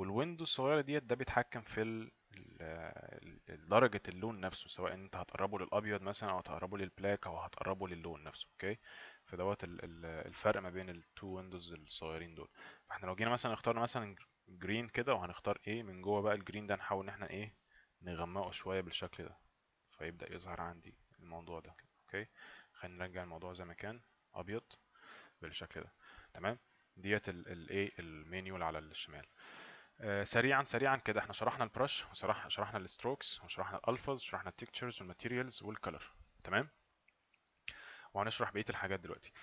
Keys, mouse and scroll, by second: 5.6 click, 7.3 click, 12.0 click, 22.0 click, 23.3 click.